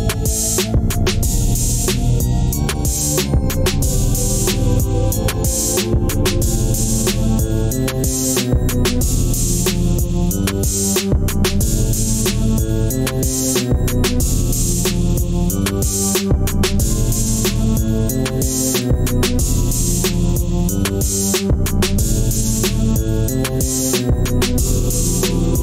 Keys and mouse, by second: 2.6 click, 4.3 click, 10.6 click, 17.1-18.9 drag, 19.9 drag.